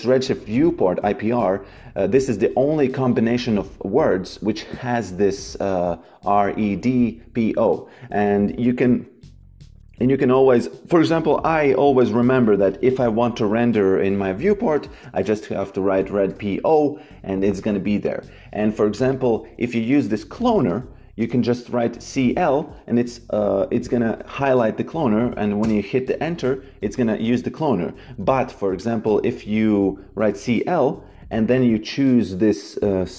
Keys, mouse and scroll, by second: 10.0 click, 11.8 click, 14.6-16.4 typing, 18.0 click, 19.8 shift+c, 21.1 BackSpace, 25.5 Return, 25.5 KP_Enter, 28.1 shift+c, 30.2 c.